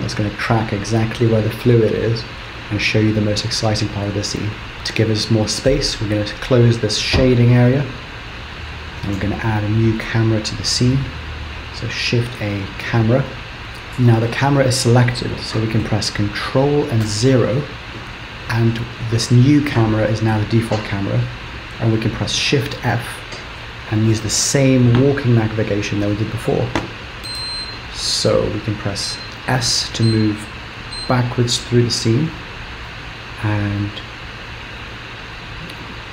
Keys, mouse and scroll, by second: 4.7 click, 6.5 right click, 8.3 scroll up 2, 8.8 scroll down 1, 9.1 shift+a, 17.0 ctrl+KP_0, 22.6 shift+f.